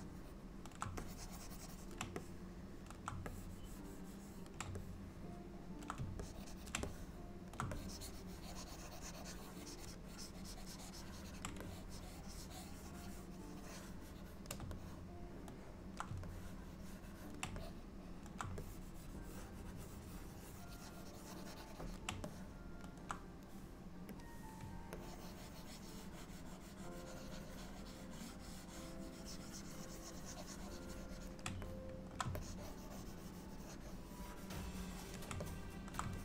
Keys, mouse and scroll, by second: 0.0 middle click, 1.1 ctrl+click, 2.3 middle click, 3.4 ctrl+click, 4.9 middle click, 6.3 ctrl+click, 6.9 middle click, 7.8 ctrl+click, 10.0 ctrl+click, 10.2 ctrl+click, 11.7 shift+click, 11.8 shift+click, 14.9 middle click, 16.4 ctrl+click, 17.7 middle click, 18.7 ctrl+click, 22.3 middle click, 24.3 click, 25.0 ctrl+click, 31.7 middle click, 32.4 ctrl+click, 35.5 middle click.